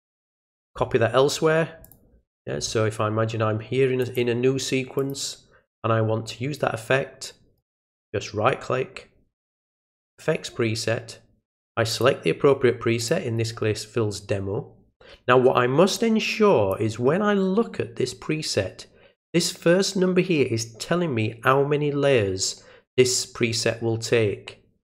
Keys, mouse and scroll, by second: 1.8 click, 4.0 click, 5.0 click, 7.6 right click, 10.1 click, 11.9 click, 13.0 click, 15.9 click.